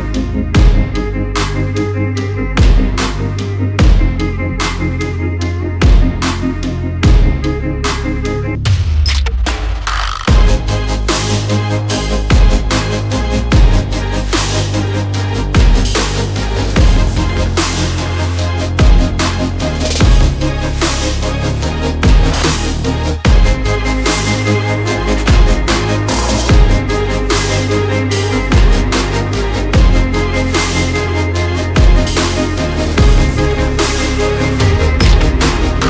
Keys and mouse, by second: 2.3 r, 5.1 middle drag, 5.6-6.1 shift+middle drag, 6.3 r, 8.9-11.1 middle drag, 11.2 shift+middle click, 13.8-16.2 middle drag, 16.5 ctrl+z, 17.5 r, 24.5 r, 30.8-32.3 middle drag, 32.5 shift+middle click, 33.3-34.5 middle drag, 34.8 g.